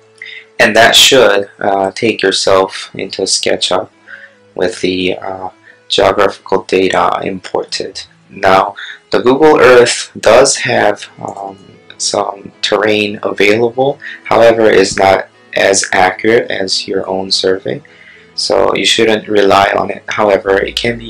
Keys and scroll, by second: 7.4 space.